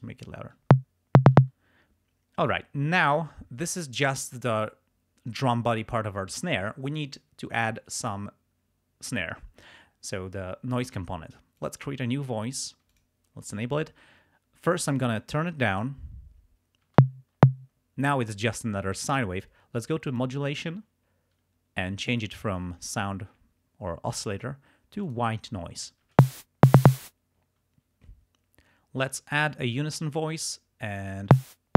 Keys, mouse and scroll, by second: 0.6 space, 1.4 space, 11.6 click, 12.9 click, 15.2 click, 16.9 space, 20.1 click, 22.2 click, 25.1 click, 26.1 space, 27.0 space, 29.2 click, 31.3 space.